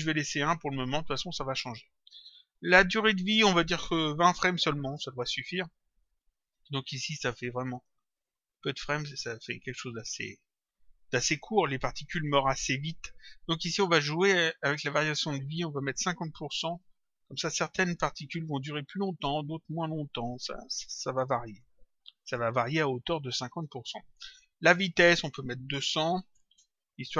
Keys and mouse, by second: 3.0 click, 5.5 click, 6.9 click, 14.6 click, 16.9 Return, 21.4 click, 24.6 click.